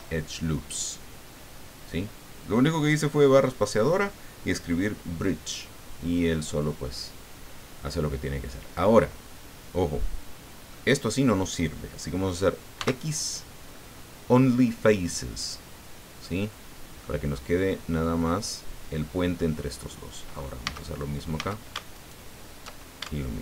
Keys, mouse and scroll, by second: 9.3-10.8 drag, 12.7 x, 15.4 click, 16.2 middle click, 19.8 middle click, 20.2 right click, 20.6 a, 21.3 a, 21.9 alt+shift+right click.